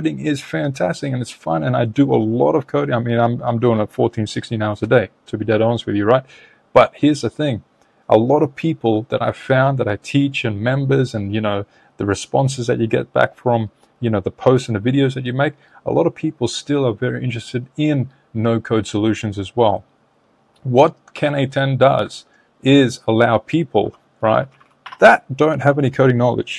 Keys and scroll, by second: 21.1 super+Tab.